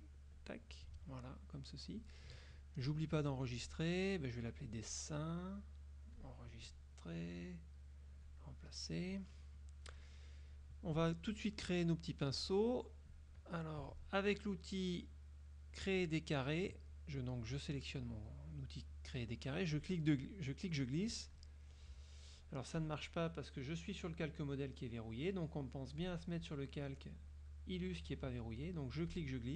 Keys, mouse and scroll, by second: 0.4 click, 1.1-1.5 scroll up 2, 1.2 click, 2.9 click, 4.7 click, 6.2 click, 8.4 click, 8.9 middle click, 9.6 middle click, 16.1 click, 19.9-21.7 drag, 22.9 click, 26.1 click, 29.2-29.5 drag.